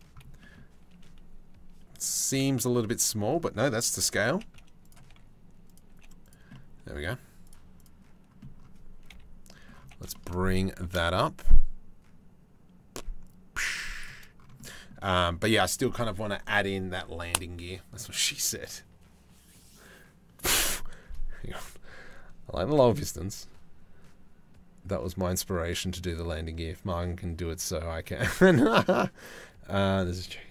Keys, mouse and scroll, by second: 0.0 click, 1.9 KP_7, 3.9 g, 4.7 r, 5.5 g, 7.4 click, 8.7 KP_3, 10.2 g, 14.2 middle click.